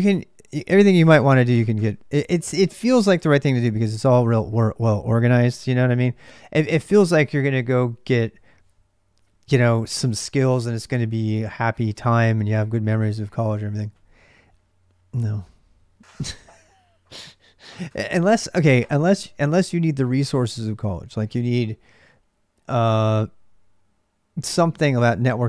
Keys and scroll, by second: 0.0-25.4 typing.